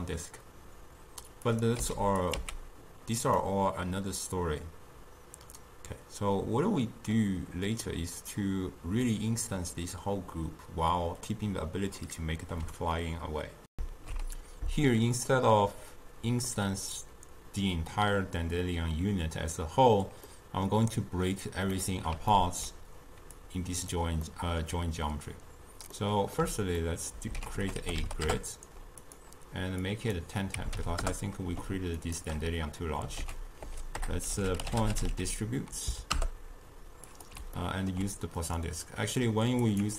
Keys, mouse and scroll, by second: 1.5 click, 1.9 x, 2.3 click, 2.5 x, 3.5-6.6 middle drag, 13.8 ctrl+alt+shift+q, 15.3-18.4 middle drag, 20.3-23.4 middle drag, 23.4 click, 24.3-27.4 middle drag, 27.4 ctrl+a, 29.9-32.2 drag, 33.3 ctrl+a, 37.6 ctrl+middle click, 38.4 click, 39.7 click.